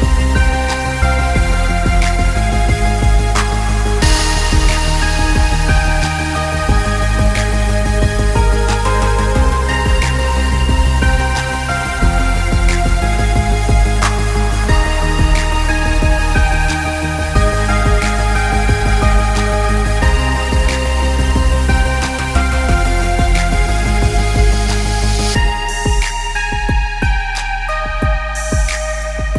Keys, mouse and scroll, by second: 8.5 click, 12.5 click, 17.8 click, 20.2 right click, 22.0 click, 23.4 click, 23.6 shift+click, 27.6 click.